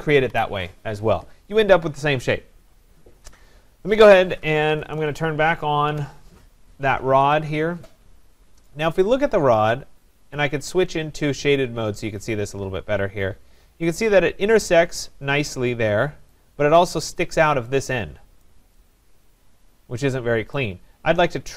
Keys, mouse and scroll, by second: 0.3 Delete, 4.3-5.3 typing, 5.9 Return, 7.3 click, 8.7 right click, 10.2 click, 11.5 click, 12.0-12.5 scroll down 4, 12.7 middle click, 15.5 scroll, 15.9 middle click, 16.3 right click, 18.5 right click, 20.6 right click.